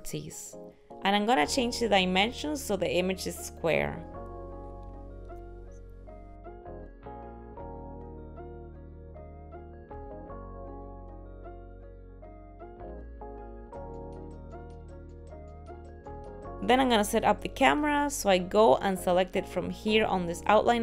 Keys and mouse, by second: 4.7 click, 19.9 click.